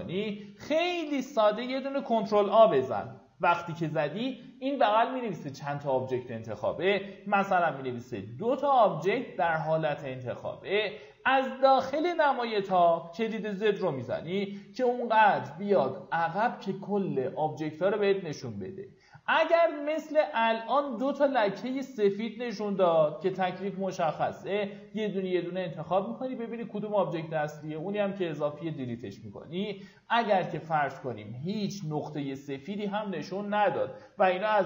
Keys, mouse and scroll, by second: 1.8 ctrl+a, 7.3 t, 12.6 z, 15.3-16.3 drag, 18.4 ctrl+a, 19.9 q, 30.1 click, 31.4 ctrl+a, 34.2-34.6 scroll down 1.